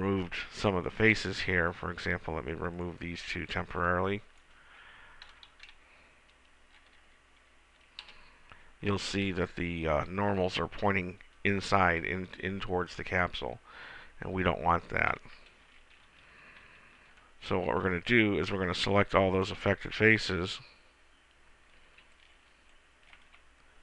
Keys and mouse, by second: 3.0-4.6 drag, 3.6 b, 5.8 Delete, 9.6-13.6 middle drag, 16.8 ctrl+z, 18.1 a, 19.1 b, 22.3 b.